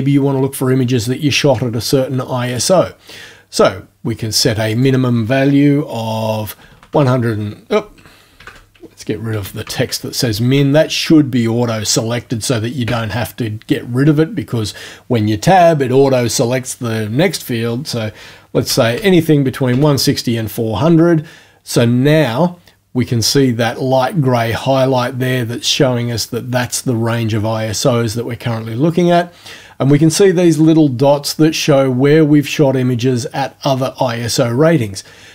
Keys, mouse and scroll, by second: 2.6 click, 4.7 click, 6.6 KP_1, 6.7 KP_6, 6.9 KP_0, 8.4 shift+Home, 9.3 KP_1, 9.4 KP_6, 9.6 KP_0, 12.9 Tab, 18.5 KP_4, 18.7 KP_0, 19.7 KP_Enter.